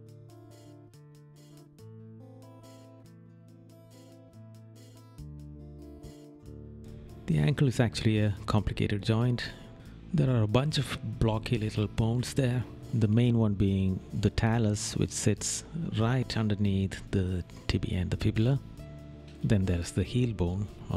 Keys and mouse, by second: 3.6 middle click, 5.3 right click, 6.7 right click, 7.6 right click, 8.4 right click, 8.9 right click, 10.5 right click, 11.6 right click, 12.3 middle click, 14.3 right click, 16.1 right click, 17.3 right click, 18.2 right click, 20.7 right click.